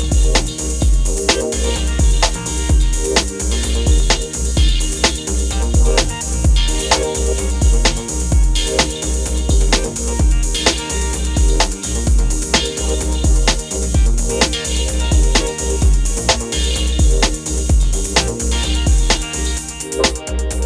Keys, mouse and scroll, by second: 7.6-7.9 alt+scroll down 1, 8.4 click, 8.9 alt+scroll up 1, 9.7-10.5 scroll down 1, 10.5 click, 20.4 alt+scroll up 1.